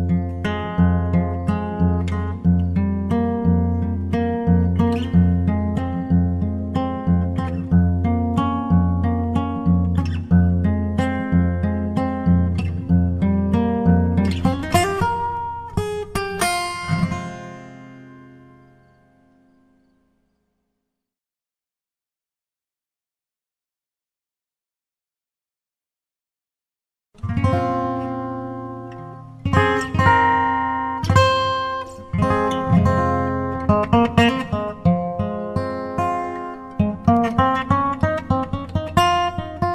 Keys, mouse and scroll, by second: 1.7-3.7 drag, 2.3-6.9 middle drag, 6.1-8.0 right drag, 6.9 g, 9.5 ctrl+z, 12.9 g, 14.2-16.2 drag, 14.8-21.7 middle drag, 20.5-22.4 right drag, 21.3 g, 23.1-24.9 drag, 23.9-25.6 right drag, 24.2 g, 28.7-30.9 drag, 29.3-31.2 right drag, 29.8 g, 32.3-34.2 drag, 33.0 Tab, 33.7-35.8 middle drag, 39.6-39.7 drag.